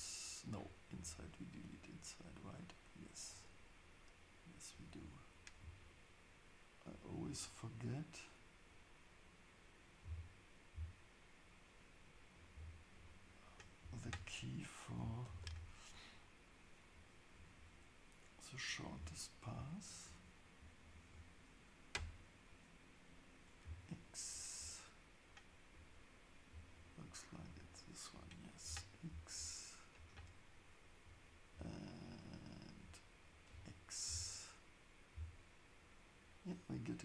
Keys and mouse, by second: 0.9 click, 5.8 alt+click, 10.0 x, 13.0 shift+click, 14.0 f, 15.3 ctrl+shift+s, 23.6 x, 25.7 click, 28.6 x, 34.0 x.